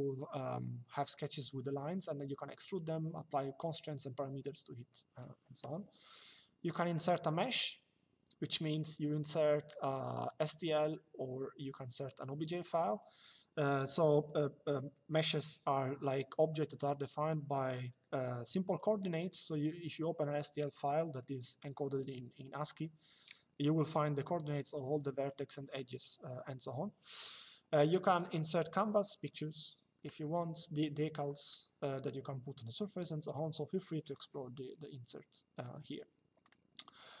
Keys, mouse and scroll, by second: 36.2 click.